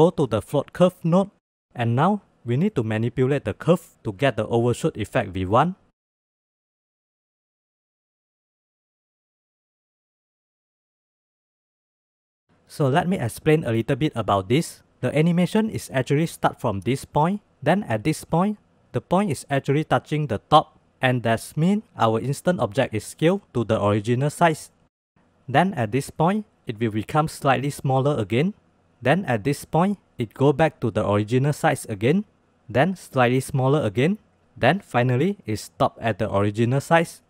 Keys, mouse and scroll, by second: 1.9 ctrl+z, 2.4 click, 3.2 click, 3.8 click, 4.3-5.3 drag, 5.4 click, 6.2 click, 6.6 click, 7.2 click, 7.6 click, 8.4 click, 9.1-10.3 drag, 10.6-12.4 drag.